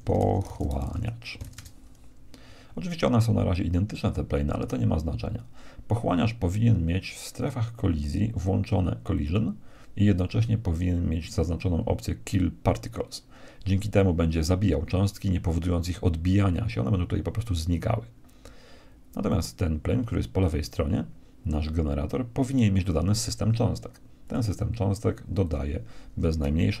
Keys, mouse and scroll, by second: 7.3-9.1 drag, 9.3-10.9 drag, 13.1-15.0 drag, 19.3-21.1 right drag, 24.2-26.8 drag.